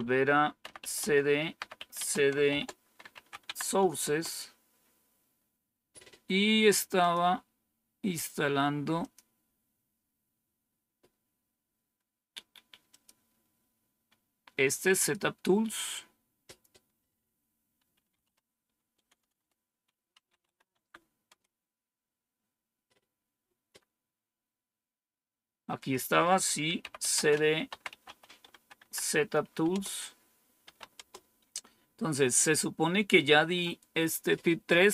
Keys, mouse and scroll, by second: 0.3-3.9 typing, 6.9 click, 8.1 click, 8.9 click, 12.8 click, 14.8 click, 16.3 click, 17.6-20.8 typing, 21.2 Return, 25.7 click, 26.5-28.9 typing, 29.6 Return, 30.3-31.0 typing.